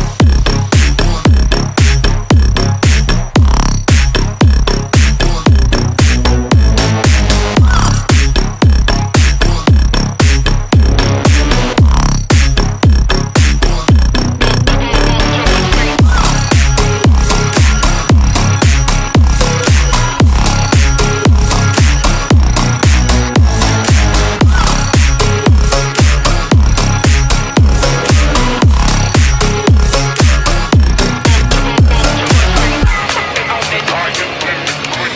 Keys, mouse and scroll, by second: 0.2 click, 0.8 click, 1.1 click, 1.7 click, 2.3-3.1 drag, 3.8 shift+z, 5.3 click, 5.7 click, 6.8 scroll up 2, 7.5-9.3 middle drag, 7.5-8.9 scroll up 1, 10.3 click, 10.6 click, 11.4 shift+z, 12.2-12.9 middle drag, 14.3 click, 14.7 m, 15.5 click, 16.1 m, 17.1 shift+z, 17.5-18.0 middle drag, 19.4 click, 21.1 click, 23.9 shift+z, 24.5-25.0 middle drag, 25.0 scroll down 2, 25.6-26.1 shift+middle drag, 26.8 middle click, 28.1-28.9 scroll down 1, 28.9 click, 28.9-29.5 scroll down 1, 29.5 click, 30.0-30.8 drag, 31.2-32.5 ctrl+middle drag, 33.9-35.1 drag.